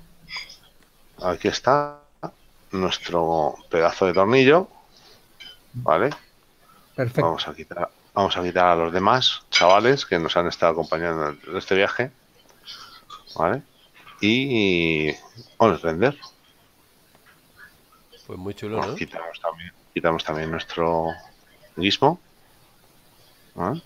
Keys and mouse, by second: 2.2 KP_Decimal, 3.5 middle click, 7.7 click, 15.1 click, 16.4 middle click, 19.4 click, 20.1 middle click, 21.4 shift+middle click.